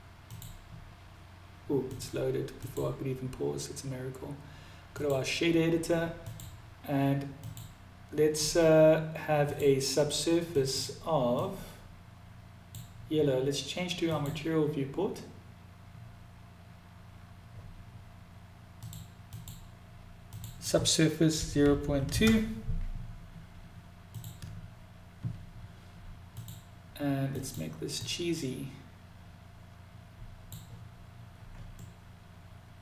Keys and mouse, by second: 1.3 click, 1.9-4.5 drag, 5.6 click, 8.8 click, 14.2 click, 19.7-24.7 drag, 25.7 click, 31.2-32.6 middle drag.